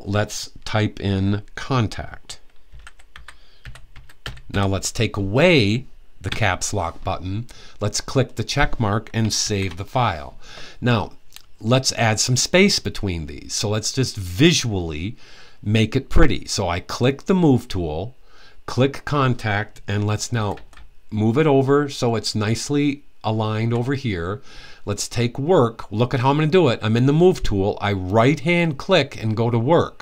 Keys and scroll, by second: 2.2-4.7 typing, 9.1 super+s, 20.0 Right, 20.2 Right, 20.5 Right, 20.9 Right, 21.1 Right, 21.2-21.7 typing.